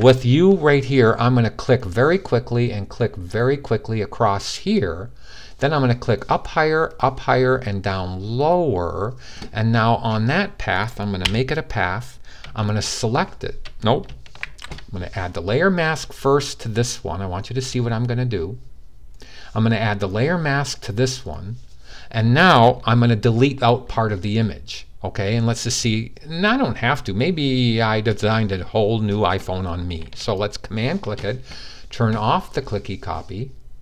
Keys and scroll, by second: 14.1 d.